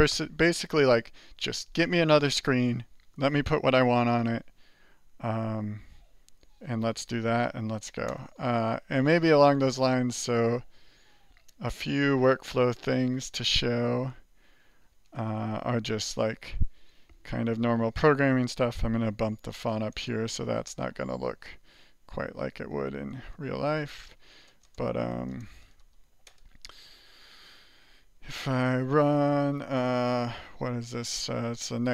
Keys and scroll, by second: 8.1 alt+Return, 12.3 ctrl+=, 13.4 BackSpace, 19.4-26.8 typing, 23.7 Return.